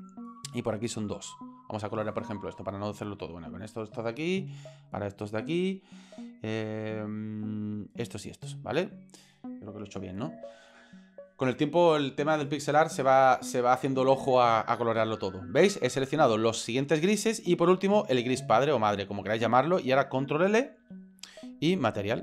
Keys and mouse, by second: 0.6 shift+right click, 1.0 shift+right click, 1.5 shift+right click, 3.3 shift+right click, 4.8 shift+right click, 5.5 shift+right click, 7.8 shift+right click, 8.4 shift+right click, 18.6 shift+right click, 20.8 ctrl+l.